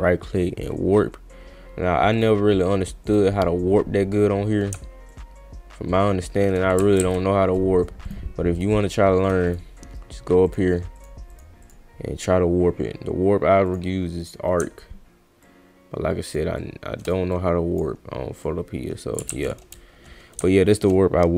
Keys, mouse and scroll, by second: 0.6 click, 2.2 click, 3.0 click, 5.1-6.4 shift+drag, 7.0 ctrl+z, 8.0 right click, 8.6 right click, 9.4 click, 10.4 click, 11.0 click, 11.3 click, 11.6 click, 13.7 click, 15.4-16.4 shift+drag, 16.6 shift+click, 17.3 click, 18.4-19.1 drag, 19.3 ctrl+z, 21.0-21.3 drag.